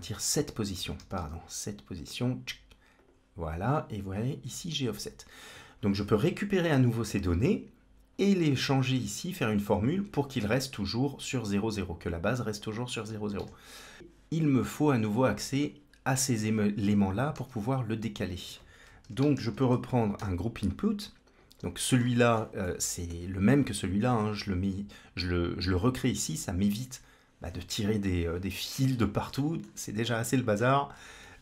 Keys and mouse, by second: 11.4-12.4 drag, 13.2 shift+a, 17.2 shift+a, 21.4 click, 22.2 middle drag, 22.5 middle click, 25.7 click, 29.2 middle click, 31.1 middle click.